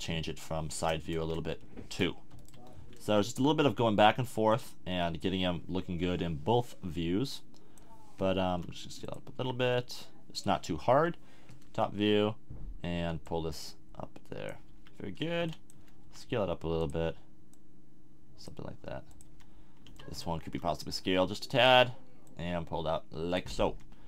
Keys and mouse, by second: 0.0 KP_1, 3.0 s, 4.6-6.3 drag, 6.6 click, 8.5 s, 9.1 click, 9.6 s, 10.9 KP_7, 14.7 a, 15.4 b, 16.0 s, 16.9-18.8 drag, 18.7 s, 19.3 a, 19.8 b, 20.5 s, 23.6 a.